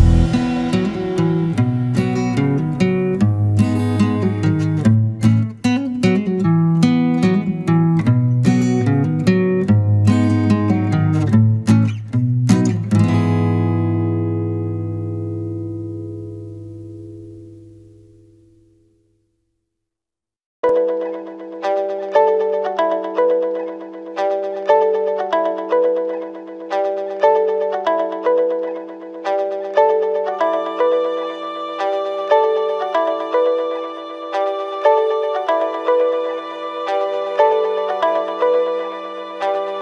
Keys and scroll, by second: 6.1 ctrl+-, 25.0 ctrl+=.